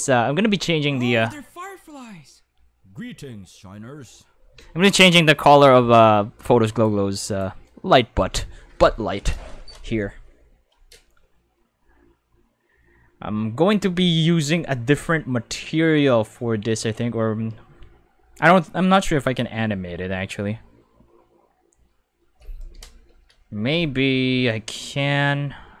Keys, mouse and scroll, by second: 4.6 space, 4.7 5, 6.6 click, 7.3 click.